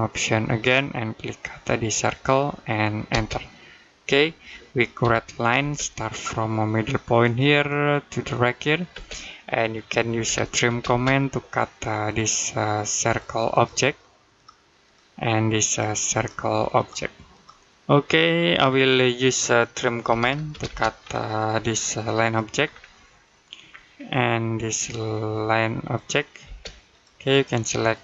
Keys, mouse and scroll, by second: 0.4 click, 2.9 space, 4.0 middle click, 4.8 l, 5.4 space, 7.0 click, 8.7 space, 10.0-10.5 typing, 11.9 click, 18.2 scroll down 1, 18.7 middle click, 19.9-20.3 typing, 20.8-21.4 scroll up 1, 21.4 click, 22.5-23.0 scroll down 1, 23.1 middle click, 23.5-24.6 scroll up 1, 24.6 click, 26.3 space, 26.7 click.